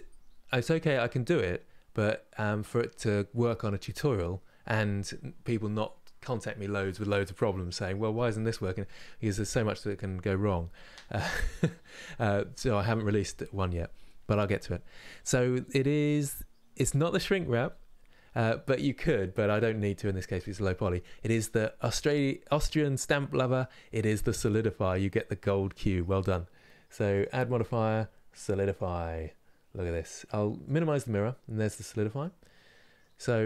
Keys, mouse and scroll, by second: 26.0-26.8 scroll down 2, 28.4-32.0 drag, 32.0-33.0 middle drag, 33.0 scroll up 1.